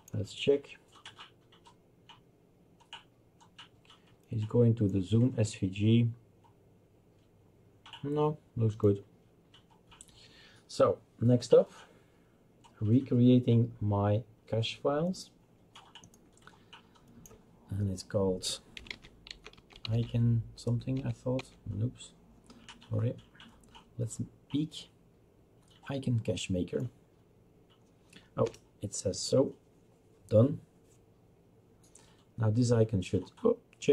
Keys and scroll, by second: 18.6-20.3 typing, 20.9 Tab, 21.3 Tab, 28.5 Return.